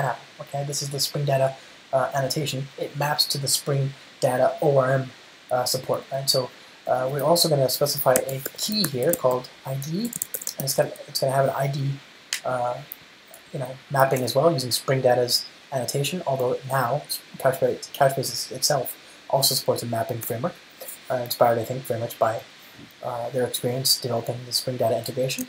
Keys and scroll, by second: 8.0 Return, 14.3 alt+Return, 25.2 Return.